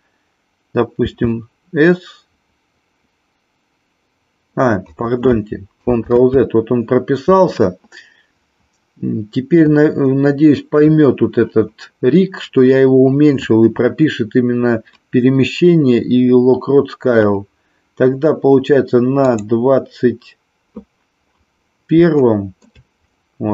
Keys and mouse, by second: 1.1 s, 6.2 ctrl+z, 19.3 click, 22.3 shift+middle click.